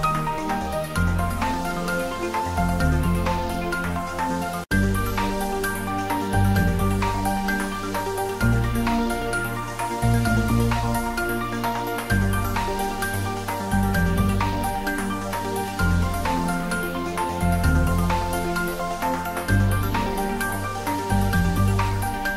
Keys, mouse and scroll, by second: 1.3 click, 2.0 g, 2.8 click, 3.3 scroll up 1, 5.2-5.9 scroll down 1, 5.9 click, 9.0 click, 9.8 ctrl+z, 10.5 click, 14.8 click, 15.5 g, 17.9 click, 18.5-19.0 g, 19.4 z, 20.8 middle click, 21.0-22.3 typing, 21.9 click.